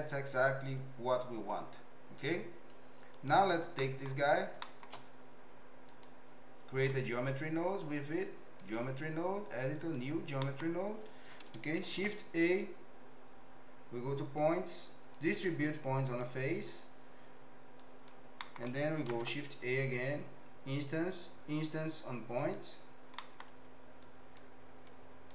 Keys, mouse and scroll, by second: 1.4 z, 3.2 click, 3.7-4.1 middle drag, 4.6 shift+middle click, 5.9-8.8 drag, 9.9 click, 10.5 middle click, 11.8 shift+a, 17.9 click, 18.4 middle click, 19.1 shift+a, 23.2 middle click, 24.0 click, 24.9 click.